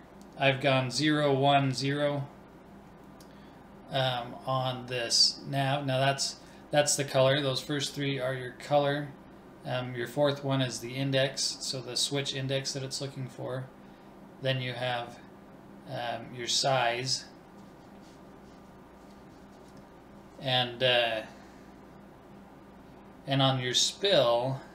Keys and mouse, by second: 6.8 BackSpace, 16.8 click, 19.1 click.